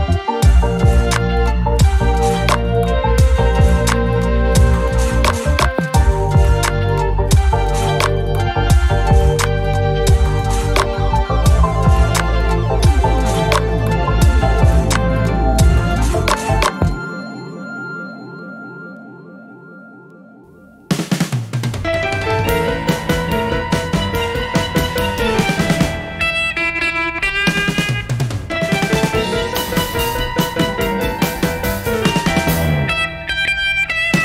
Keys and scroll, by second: 0.0 shift+F6, 0.2 space, 6.6 F1, 7.9 shift+F6, 16.5 F1, 16.9 -, 17.0 -, 17.1 +, 17.2 +, 18.1 ctrl+d, 19.7 F7, 20.8 F1, 21.3 typing, 22.7 ctrl++, 24.1 space, 25.9 shift+F6, 30.7 F1, 31.1 shift+F6.